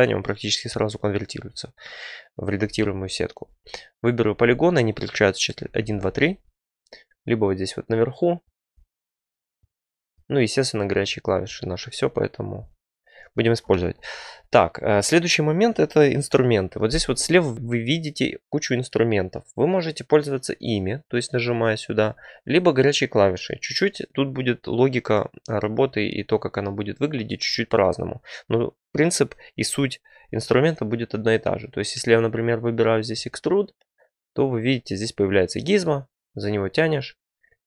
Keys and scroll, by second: 2.5 3, 5.6 1, 5.7 2, 5.8 3.